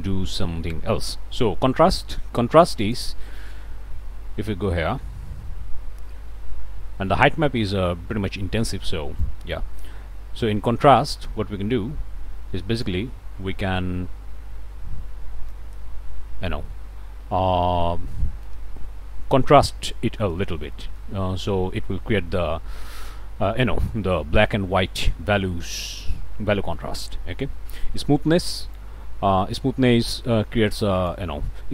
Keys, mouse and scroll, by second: 2.8 click, 3.3 0, 3.7 Return, 9.2-16.8 drag, 16.8-17.3 scroll up 1, 17.6 middle click, 18.7-19.1 scroll up 1, 20.7 middle click, 25.6 scroll up 1, 26.2 scroll up 1, 26.8 middle click, 28.8-31.3 drag.